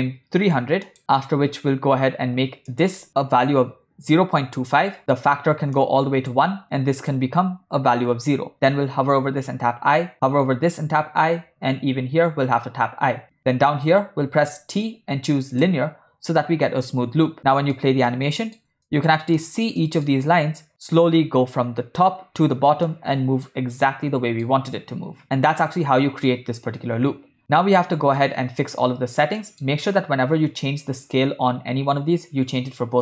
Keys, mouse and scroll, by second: 1.0 Right, 1.0 click, 2.8-4.9 drag, 5.0 middle drag, 5.8 click, 7.0-8.2 drag, 9.4 i, 10.8 i, 12.4 i, 14.5 t, 17.0 space, 17.3-17.7 middle drag, 18.2-18.6 ctrl+middle drag, 18.9 shift+middle drag, 19.4 ctrl+middle click, 19.9 ctrl+middle click, 22.9-23.5 middle drag, 23.7-24.4 shift+middle drag, 27.4 space, 28.3-28.7 ctrl+middle drag, 29.5 middle click.